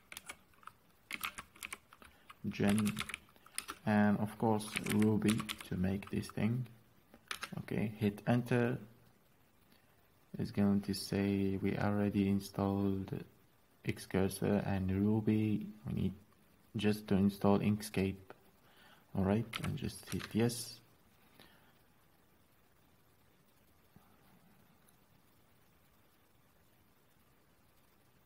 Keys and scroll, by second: 0.0-6.5 typing, 7.6-8.3 typing, 20.1 typing, 20.5 Return.